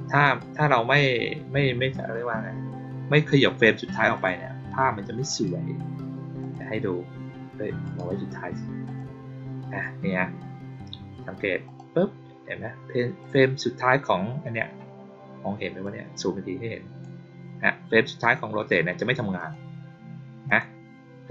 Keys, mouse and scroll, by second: 0.2 right click, 4.1 click, 5.2 right click, 6.3 click, 7.8 right click, 8.8 click, 11.6 click, 13.1 click, 15.8-16.9 drag, 18.1 click, 19.3 click, 20.4 click.